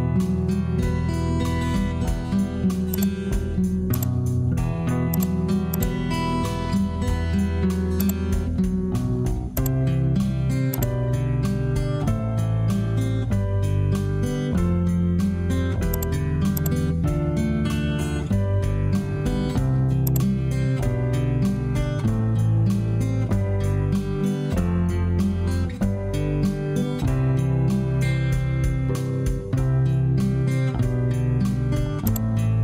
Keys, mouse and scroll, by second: 0.6 Escape, 18.1 Return.